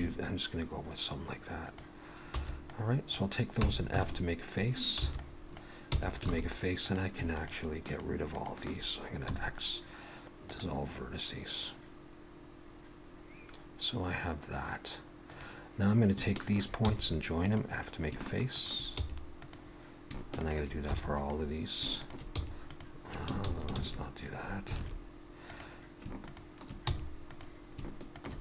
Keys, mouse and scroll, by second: 1.5 click, 2.3 b, 3.5 f, 4.0 alt+a, 5.0 b, 5.9 f, 6.3 alt+a, 6.8 click, 7.3 shift+click, 7.9 shift+click, 8.3 shift+click, 9.3 x, 15.3 click, 16.3 shift+click, 16.8 f, 17.4 click, 18.5 click, 19.0 f, 19.4 click, 20.4 click, 20.9 f, 21.1 click, 22.0 click, 22.4 f, 22.6 click, 23.4 ctrl+z, 23.9 ctrl+z, 24.8 alt+a, 25.5 click, 26.2 shift+click, 26.9 f, 27.3 click, 28.1 click.